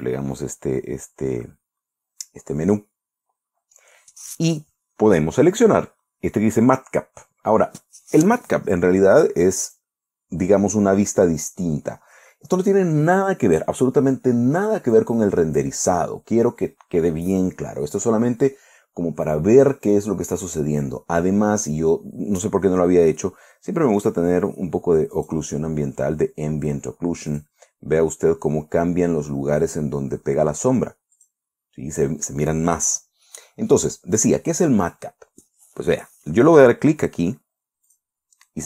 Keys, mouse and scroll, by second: 0.3-1.3 scroll down 6, 10.1 click, 11.9-12.2 scroll down 2, 12.5-12.9 scroll up 2, 15.4 click, 21.6-22.1 scroll up 2, 22.4 scroll down 2, 25.6 click, 27.8 click, 31.6 click, 33.7 click, 34.3-34.7 scroll down 2, 38.3 click.